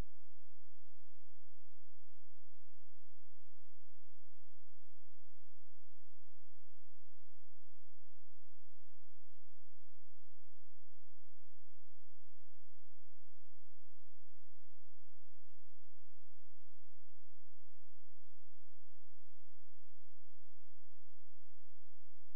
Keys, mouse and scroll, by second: 2.1 shift+Page_Up, 3.8 click, 4.4-4.9 scroll down 1, 4.9-5.4 scroll up 1, 7.0 click, 8.7 shift+click, 13.3-13.6 scroll down 1, 14.0-15.8 scroll up 1, 16.6 click, 20.6 space, 21.2-21.9 scroll down 1, 21.9 click.